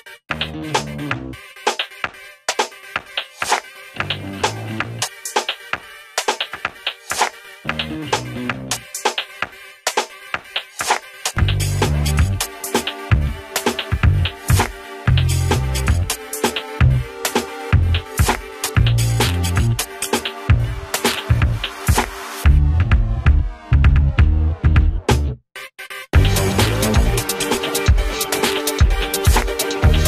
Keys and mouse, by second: 0.5 click, 1.1 ctrl+z, 1.7 click, 5.7 g, 8.0-10.7 drag, 19.5 Tab, 21.0 click, 29.2 g, 29.9-30.0 drag.